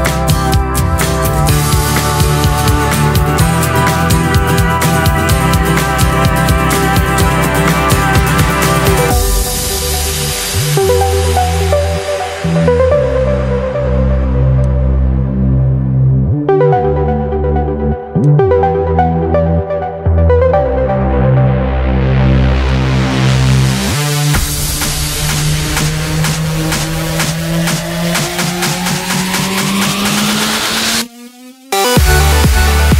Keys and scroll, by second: 31.4 ctrl+=, 32.1 ctrl+=.